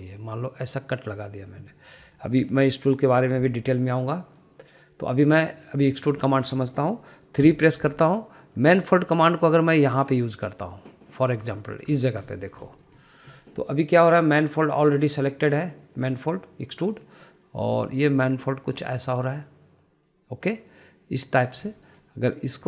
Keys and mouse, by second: 0.2 click, 1.6 click, 3.4 middle click, 5.7 click, 7.0 middle click, 7.4 shift+middle click, 7.6 middle click, 8.5 3, 9.5 click, 10.0 shift+click, 10.8 shift+click, 12.1 shift+click, 12.6 middle click, 13.0 shift+middle click, 13.4 middle click, 13.7 shift+middle click, 16.0-17.4 drag, 18.1 middle click, 19.0 click.